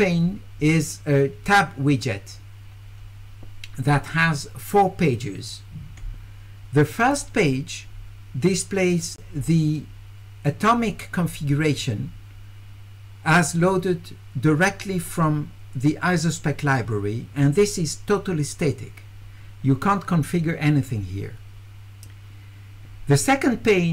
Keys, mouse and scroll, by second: 7.1 click.